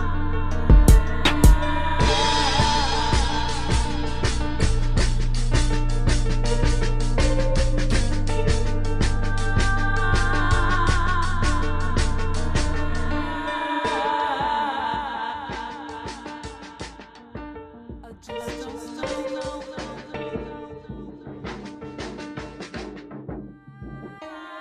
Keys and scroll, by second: 1.1 space, 4.3 space, 5.4 space, 6.1 space, 7.5 space, 13.6 space, 14.0 space, 15.9 space, 16.3 space, 17.2 space, 23.4 space.